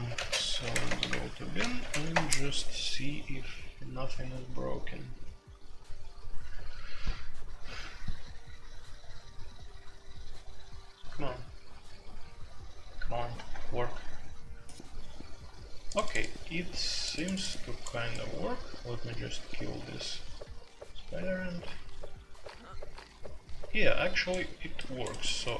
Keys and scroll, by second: 0.0-2.1 typing, 0.7 Tab, 0.8 Return, 1.1 Return.